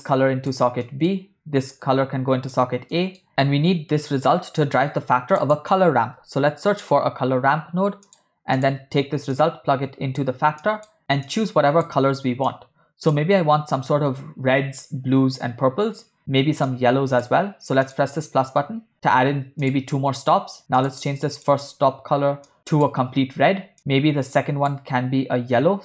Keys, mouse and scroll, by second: 0.8 middle click, 1.7-2.7 drag, 3.0 middle click, 3.3 x, 5.0 shift+a, 9.4-10.4 drag, 10.7 click, 11.4-11.9 drag, 12.6-13.1 drag, 16.7 click, 18.0 drag, 19.8 click, 20.9 drag, 21.4 click.